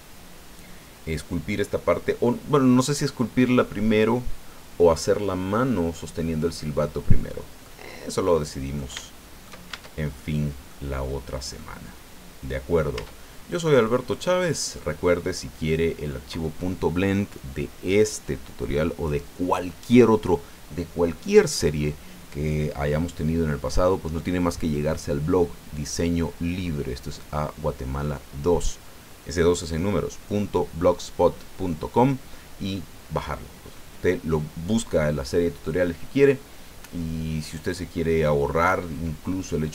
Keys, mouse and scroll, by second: 1.7 middle click, 2.7 scroll up 2, 7.6-8.9 middle drag, 9.0 shift+middle click, 9.7 shift+Tab, 10.2 shift+click, 11.6-12.9 drag, 12.9 Tab, 13.4 scroll down 1, 13.8-14.9 drag, 15.1-16.3 drag.